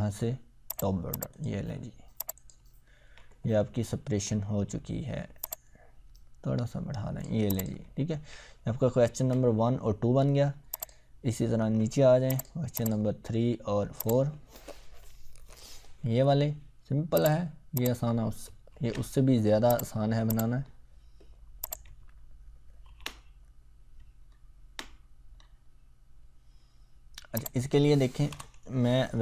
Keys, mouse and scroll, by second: 2.8 ctrl+scroll up 1, 5.4-7.3 drag, 7.9 ctrl+scroll down 1, 8.9-9.3 ctrl+scroll up 1, 10.8 click, 11.1 scroll down 1, 12.3 click, 14.3 click, 14.4 scroll down 1, 17.2 click, 19.7 click, 20.6-21.6 scroll down 1, 21.6 click, 21.9-22.4 ctrl+scroll up 1, 22.9 ctrl+v, 24.2-24.7 ctrl+scroll up 2, 24.7-25.3 ctrl+scroll up 1, 25.3 scroll up 1, 27.4 click, 28.3 Return.